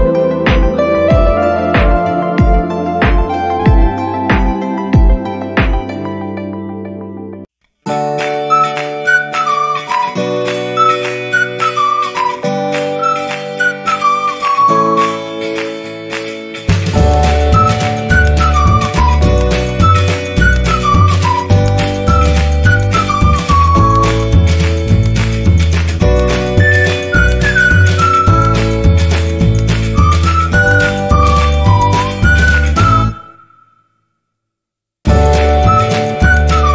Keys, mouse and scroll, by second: 2.4 ctrl+i, 4.4-4.7 scroll up 2, 7.3 click, 13.7 click, 14.7 space, 15.0 click, 15.1 space, 16.4 click, 18.4 scroll up 1, 18.7 click, 20.3 ctrl+z, 20.8 ctrl+z, 20.8 ctrl+d, 22.1 ctrl+d, 22.7 space, 26.6 right click, 29.6 click, 32.0 click, 33.3 click, 33.9 click, 35.2 click, 35.5 ctrl+i, 36.5 click.